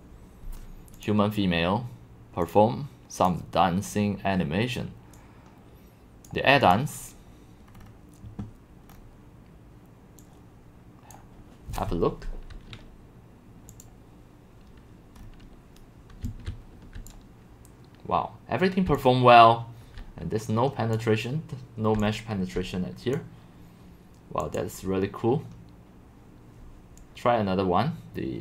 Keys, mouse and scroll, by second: 1.0 click, 2.4 click, 3.2 click, 5.1-6.7 drag, 7.7-8.1 scroll down 4, 8.2 scroll, 8.9-9.2 scroll, 10.2 click, 15.2-16.1 scroll, 16.0-17.0 typing, 16.1 scroll, 17.1-18.9 drag, 18.9-20.1 c, 20.9-22.0 drag, 22.0 c, 22.5 c, 22.5 c, 22.6 middle click.